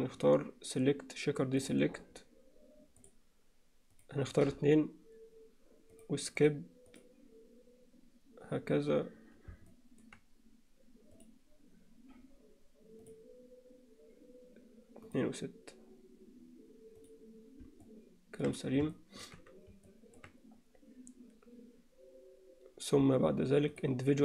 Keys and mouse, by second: 1.6-3.1 drag, 4.0 click, 6.0 click, 6.4 click, 6.9 click, 9.7 middle click, 11.1 click, 15.1 click, 17.9 middle click, 18.9 shift+middle click, 19.9 middle click, 23.8-24.2 drag.